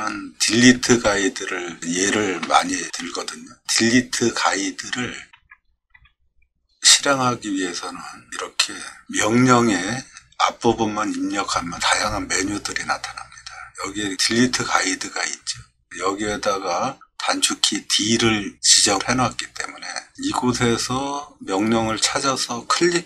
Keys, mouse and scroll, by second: 0.7 c, 1.1 e, 2.4 BackSpace, 2.6 BackSpace, 2.8 BackSpace, 5.3 d, 5.9 e.